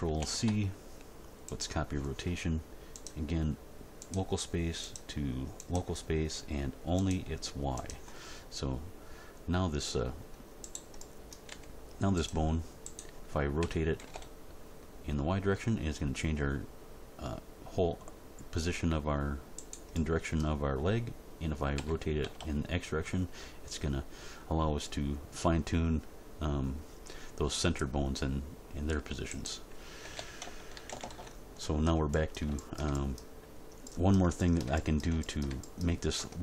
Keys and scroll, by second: 0.2 ctrl+shift+c, 11.5 g, 13.6 r, 13.9 y, 21.7 r, 22.2 x, 30.0 a, 30.7 alt+r, 30.9 alt+g, 31.1 alt+s, 36.1 Tab.